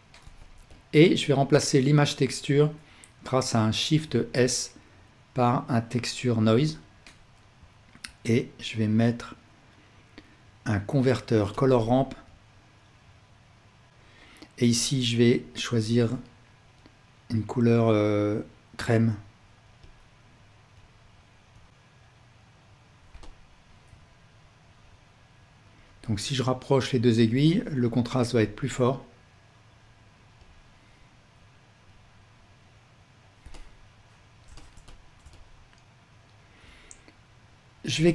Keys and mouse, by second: 0.2 g, 3.9 shift+s, 8.1 shift+a, 13.9-17.1 alt+drag, 23.3-31.0 alt+drag, 33.6-34.6 alt+drag.